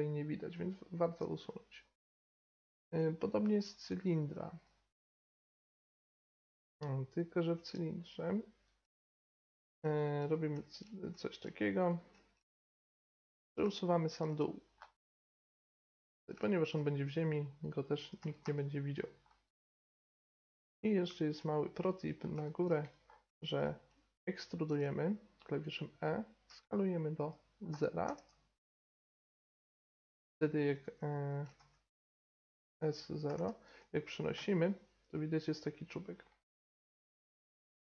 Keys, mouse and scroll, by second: 4.0-9.2 drag, 8.2-9.6 middle drag, 10.2-11.8 drag, 10.2-11.8 middle drag, 10.5 Tab, 11.2 Tab, 11.8 right click, 12.1 Tab, 14.3 middle click, 14.6-17.1 middle drag, 17.7 right click, 18.2 x, 18.5-20.4 right drag, 19.3-20.4 drag, 21.4 middle click, 21.6-22.9 middle drag, 22.9-24.5 right drag, 23.1 middle click, 23.3-25.3 middle drag, 24.7 e, 26.5 s, 28.7-30.3 middle drag, 29.8 g, 31.6 ctrl+z, 32.7 s, 34.4 g, 36.8 g, 37.6-37.9 middle drag.